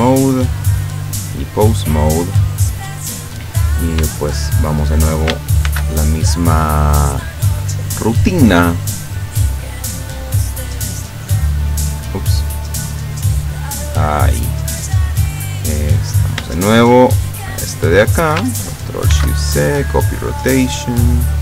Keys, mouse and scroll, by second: 0.8 click, 1.4 click, 3.4 right click, 4.7 shift+right click, 5.7 ctrl+shift+c, 6.6 click, 7.6 click, 8.1 click, 8.5 click, 9.6 click, 10.1 click, 11.0 click, 11.6 click, 12.2 click, 13.0 click, 13.6 click, 14.2 click, 15.9 right click, 17.0 shift+right click, 19.2 ctrl+shift+c, 19.6 ctrl+shift+click, 20.5 click, 21.2 click.